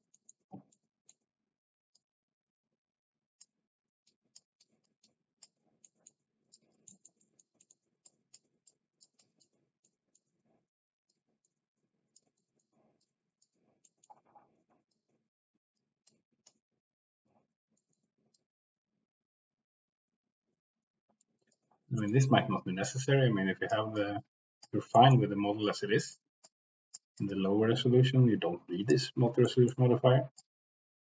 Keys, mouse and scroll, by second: 0.1 middle click, 0.7 middle click, 1.9-3.4 drag, 4.0 middle click, 4.5 middle click, 4.7 click, 5.0 click, 5.8 middle click, 6.5 click, 6.9 middle click, 7.2 middle click, 7.6 middle click, 8.1 click, 8.6 click, 9.2 click, 9.8 middle click, 11.1-12.1 drag, 12.4 middle click, 12.9 click, 13.8 middle click, 14.9 click, 16.0 click, 17.7 shift+middle click, 18.3-21.5 drag, 22.8 click, 23.9 click, 24.9 middle click, 26.4 click, 27.1-28.9 drag, 29.4 middle click, 30.4 click.